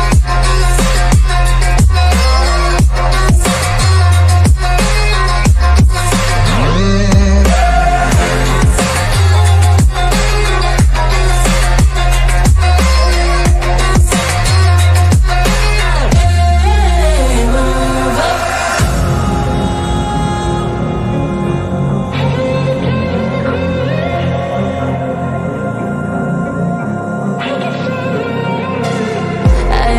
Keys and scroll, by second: 2.6 ctrl+z, 5.0 F3, 5.2 Escape, 8.9 Escape, 11.3 Escape.